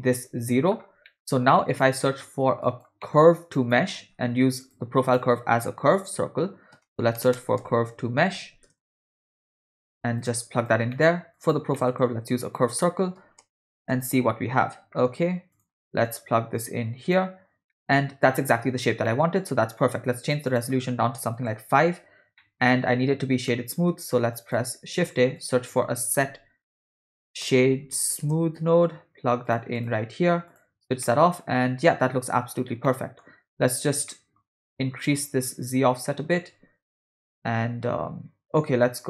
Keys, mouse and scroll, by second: 1.1 middle click, 1.6 click, 2.1 middle click, 2.6 click, 3.0 middle click, 3.2-3.5 scroll up 1, 3.5 click, 4.0 shift+a, 10.9 middle click, 11.4 click, 11.7 middle click, 11.9 scroll down 1, 12.1 shift+a, 16.6-17.3 drag, 17.7 middle click, 19.1 middle click, 19.8-21.4 drag, 22.4 middle click, 23.5 middle click, 24.4 click, 24.8 shift+a, 26.9 BackSpace, 30.5 click, 31.0-32.5 middle drag, 32.9 middle click, 34.1 middle click, 35.2-39.0 drag.